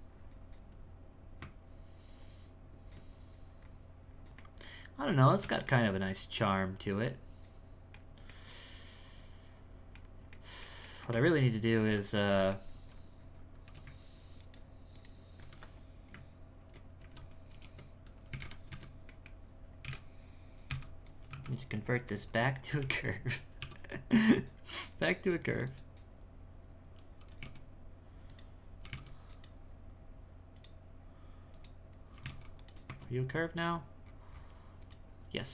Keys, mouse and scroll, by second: 1.4 Tab, 3.6-4.0 scroll up 3, 4.0-4.3 scroll down 4, 4.3 middle click, 5.1-5.5 scroll down 1, 5.5-9.9 shift+middle drag, 9.9-10.3 scroll down 1, 10.3 middle click, 11.1 Tab, 11.5-12.3 scroll up 2, 12.3 middle click, 12.9-13.6 scroll up 1, 14.3 alt+right click, 17.5 ctrl+i, 19.0 middle click, 19.3-19.8 scroll down 4, 19.8 KP_1, 20.6 KP_1, 21.3 KP_3, 21.8-22.3 scroll up 2, 22.3 Tab, 22.8 e, 23.6 w, 26.3-27.3 scroll down 2, 27.3 g, 28.8 g, 30.5 click, 31.5 click, 32.1 g, 32.9 Tab, 33.7-34.8 scroll up 11, 34.8 right click, 35.3-35.5 scroll down 1.